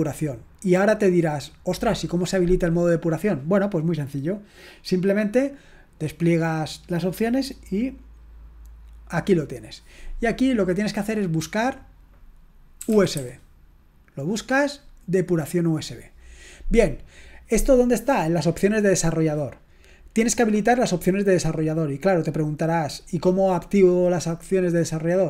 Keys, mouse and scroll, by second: 11.0 click, 12.7-13.6 typing, 15.4 click.